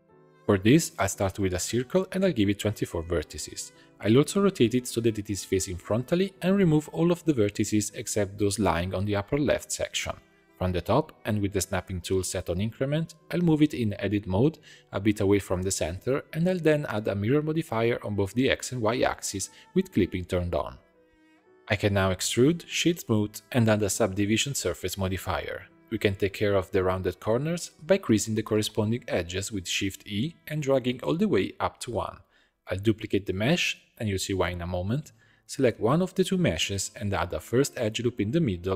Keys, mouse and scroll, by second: 0.2 shift+a, 2.5-4.4 drag, 4.4 Tab, 4.8 1, 5.2 r, 6.8 click, 7.2 shift+middle click, 7.4 click, 7.6 b, 8.6 b, 9.7 x, 10.5 a, 10.7 click, 11.5-13.3 drag, 13.3 g, 15.6 Tab, 16.5 click, 17.2-19.3 drag, 20.0 click, 20.5 Tab, 21.4 e, 22.3 Tab, 22.7 middle click, 23.2-24.4 right drag, 24.4-26.7 drag, 26.8 Tab, 27.1 2, 27.4 click, 27.9 shift+click, 28.9 shift+e, 32.3 Tab, 33.5 shift+d, 35.6 click, 36.8 click, 37.3 Tab, 38.5 ctrl+r.